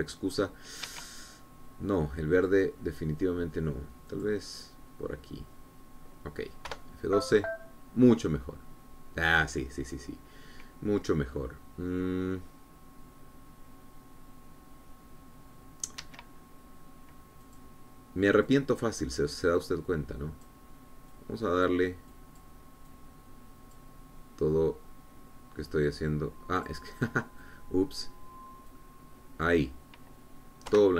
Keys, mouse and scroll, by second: 2.0 Escape, 3.5 click, 5.3 click, 7.9 F12, 17.2 Escape, 18.7 click, 19.7-21.8 drag, 22.3 click, 23.3 click, 24.1-25.1 drag, 27.8 click, 28.6 click, 29.9 click.